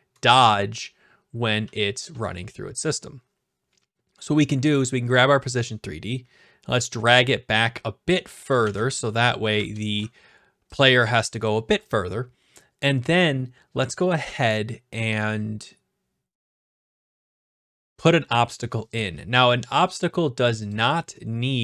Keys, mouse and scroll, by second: 0.3 typing, 1.6 typing, 2.3-3.4 right drag, 4.1-4.7 scroll down 4, 4.7 click, 8.5 click, 8.6 ctrl+z, 9.0-9.7 typing, 10.0-11.1 right drag, 11.4-12.5 drag, 18.4 middle click, 18.4 scroll up 2, 18.5-19.6 scroll, 19.8 click, 20.7 click.